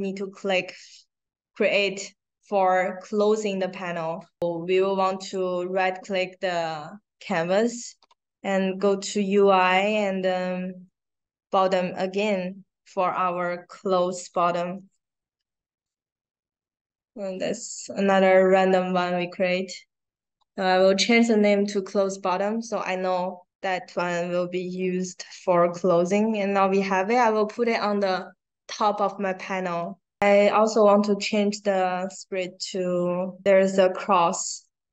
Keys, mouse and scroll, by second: 5.1 right click, 11.8 click, 13.8-14.7 typing, 17.3 click, 18.1 click, 23.5-24.7 drag, 25.3-27.5 drag, 29.8 click.